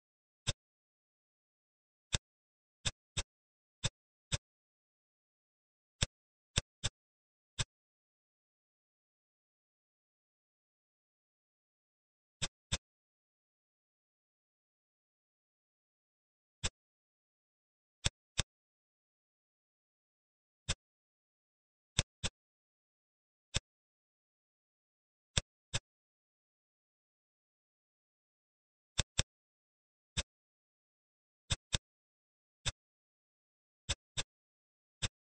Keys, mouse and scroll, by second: 0.4-1.8 middle drag, 1.8 scroll down 2, 2.1-3.1 middle drag, 3.1 click, 3.7 click, 4.2-5.1 middle drag, 5.1-5.9 scroll up 2, 5.9 click, 6.5 middle click, 6.9-7.5 scroll down 3, 7.5-8.5 middle drag, 8.5 Tab, 9.6 shift+r, 10.3 Tab, 11.2 shift+r, 11.9 Tab, 12.6 click, 13.7 shift+r, 15.0 Tab, 16.0 ctrl+r, 18.3 click, 20.1 ctrl+r, 22.2 click, 22.8 ctrl+r, 25.6 click, 26.7 ctrl+r, 29.1 click, 29.8 ctrl+r, 31.6 click, 32.3 ctrl+r, 34.1 click, 34.7 ctrl+r.